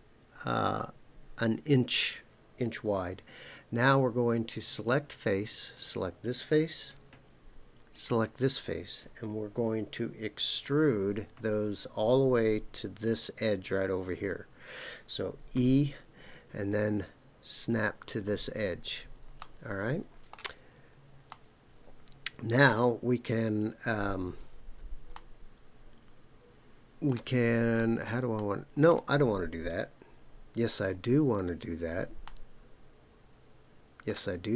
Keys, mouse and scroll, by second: 4.5 click, 5.7 click, 7.9 shift+click, 15.5 e, 18.5 click, 19.4-20.4 middle drag, 21.3-22.7 middle drag, 25.1-27.2 middle drag, 27.5-28.3 scroll up 2, 28.3 middle click, 29.2-30.2 scroll down 3, 32.2-34.2 middle drag.